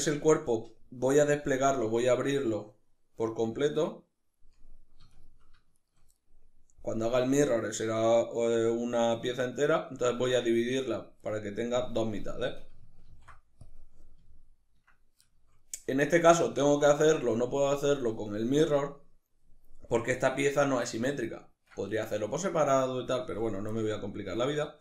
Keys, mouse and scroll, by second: 4.7 shift+right click, 5.4 shift+right click, 5.8-24.8 middle drag, 12.8 ctrl+e.